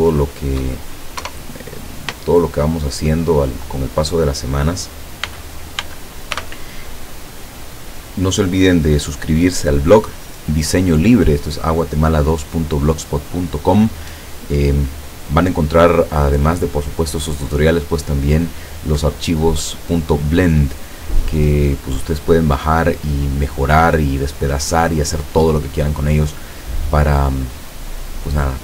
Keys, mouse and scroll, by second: 1.2 KP_0, 2.4-4.1 shift+middle drag, 5.3 n, 6.4 t, 7.3 scroll up 1.